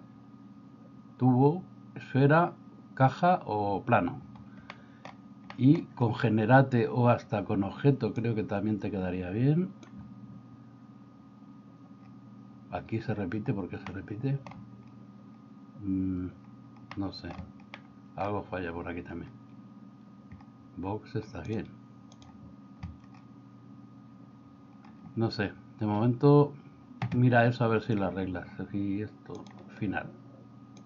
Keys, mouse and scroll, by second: 4.9 middle click, 5.6 middle click, 8.2-10.0 drag, 14.1 middle click, 17.0 middle click, 17.9 middle click, 21.6 click.